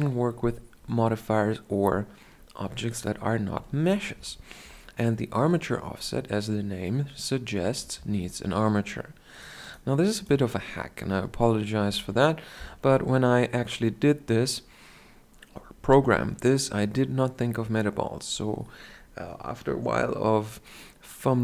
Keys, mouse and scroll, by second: 8.0 shift+a, 11.9 KP_1, 13.3-13.9 scroll up 1, 13.9-15.1 scroll up 1, 15.1-15.4 scroll up 1, 15.4 shift+scroll down 1.